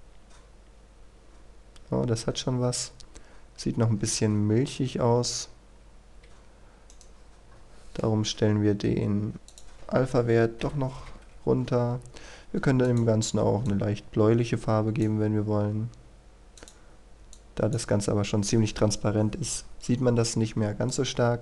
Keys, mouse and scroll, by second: 0.9-3.7 scroll down 1, 5.8 Escape, 6.9 right click, 7.5-9.5 scroll down 1, 9.5 click, 11.0 KP_1, 11.1 Return, 11.9-12.9 scroll up 1, 12.9-15.2 drag, 15.7-16.5 scroll up 1, 16.6 click.